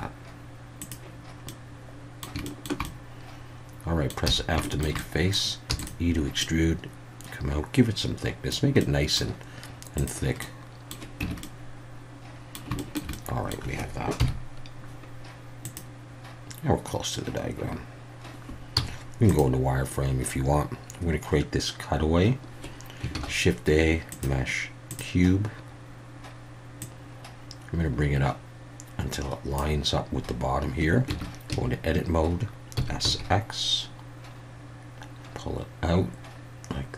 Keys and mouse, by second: 0.8 click, 1.5 middle click, 2.4 shift+middle click, 2.8-4.1 middle drag, 4.2 f, 4.6 shift+middle click, 5.0 middle click, 5.7 e, 5.8 click, 6.4-8.5 drag, 8.8 middle click, 10.5 middle click, 11.2 Tab, 11.4-12.5 middle drag, 12.8 shift+middle drag, 13.1-13.5 middle drag, 14.2 KP_1, 15.6 click, 18.8 z, 23.1 shift+a, 26.8-29.6 drag, 31.1 Tab, 31.5 a, 32.7 s, 33.1 x.